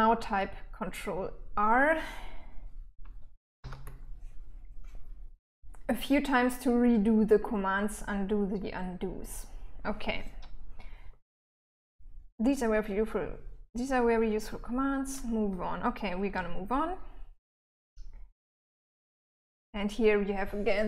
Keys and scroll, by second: 3.0 ctrl+r, 15.7-19.0 typing.